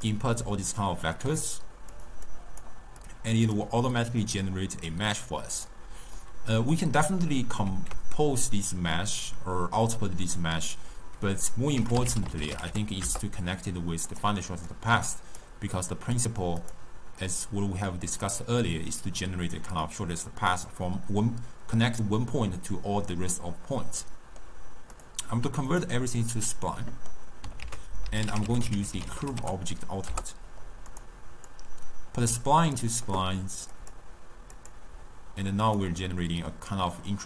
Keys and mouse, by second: 0.3 click, 1.2 click, 2.0 click, 2.3-3.1 drag, 4.4-6.3 drag, 6.3-7.7 middle drag, 7.7 ctrl+a, 14.8 click, 16.0 click, 17.3 middle click, 17.9-20.9 drag, 24.1-25.0 middle drag, 25.0-26.8 drag, 26.8 middle click, 27.7 ctrl+a, 31.6 drag, 34.4 click, 34.6-35.8 drag.